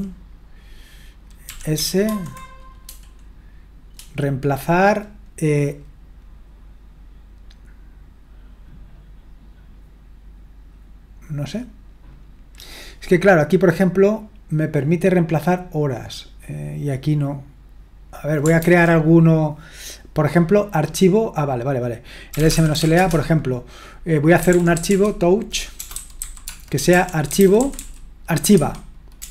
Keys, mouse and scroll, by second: 1.5-2.1 typing, 18.3-19.8 drag, 18.6 ctrl+c, 22.1-29.3 typing.